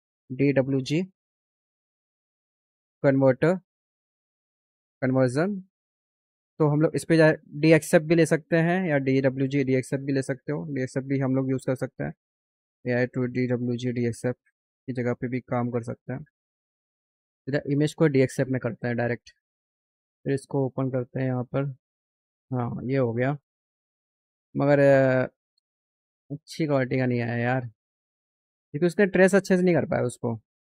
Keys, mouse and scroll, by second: 0.0-1.4 typing, 4.5 click, 16.0 scroll down 2, 17.2 click, 20.5 click, 23.2 click, 24.4 click.